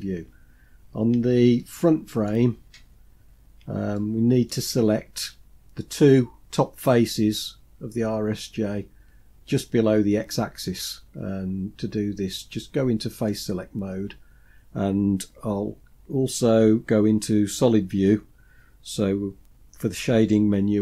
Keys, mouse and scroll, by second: 0.0-0.3 scroll up 2, 0.8-1.1 scroll up 1, 1.6 shift+middle click, 2.5-3.6 scroll up 4, 4.0 shift+middle click, 4.7-5.7 scroll up 3, 13.3 click.